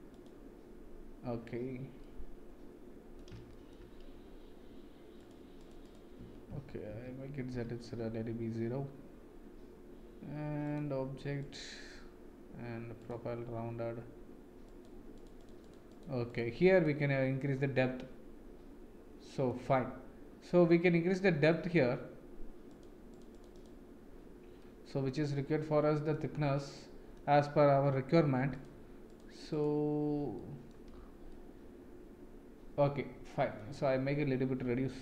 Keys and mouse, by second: 2.1-3.1 middle drag, 3.5 shift+middle click, 5.6 click, 6.5 ctrl+z, 6.9 ctrl+z, 7.5 ctrl+z, 10.6 click, 11.4 click, 13.0 click, 14.6 click, 15.1 click, 15.3 click, 15.9-17.2 drag, 17.5-19.5 middle drag, 20.5 middle click, 23.1 click, 23.5 click, 24.6-26.1 middle drag, 26.7 middle click, 28.6 click, 29.5 click, 30.3 middle click, 31.3-33.5 middle drag.